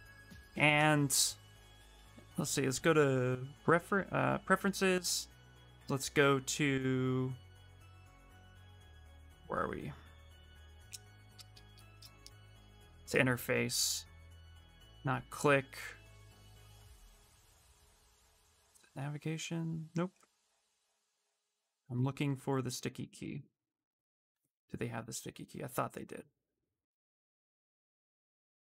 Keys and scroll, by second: 0.5 s.